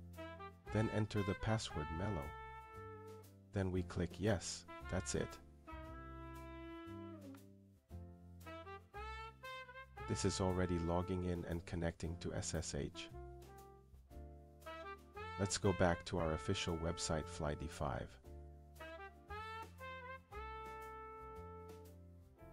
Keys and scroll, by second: 0.0 t, 0.3 Return, 2.5-5.6 typing.